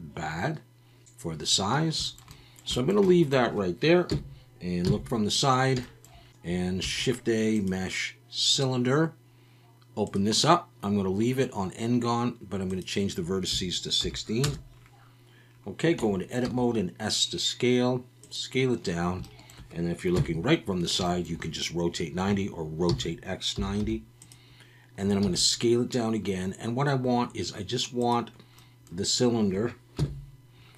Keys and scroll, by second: 4.1 KP_1, 4.8 KP_3, 6.8 shift+a, 16.0 Tab, 16.4 s, 20.1 KP_3, 22.9 r, 23.5 9, 23.8 0, 25.2 s, 30.0 KP_Decimal.